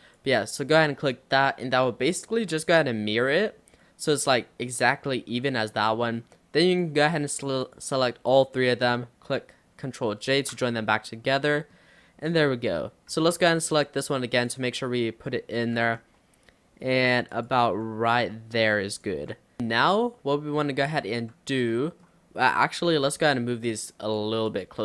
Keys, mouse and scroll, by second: 0.9-6.7 middle drag, 6.7 click, 7.7 shift+click, 8.3 shift+click, 10.3 ctrl+j, 11.3 Tab, 11.6 middle click, 12.3 click, 13.2 l, 14.4 click, 15.8 g, 17.7 r, 19.2 g, 19.6-21.4 middle drag, 21.4 Tab, 21.7-22.7 middle drag, 22.7 click, 23.1 l, 23.7 click, 24.5 click.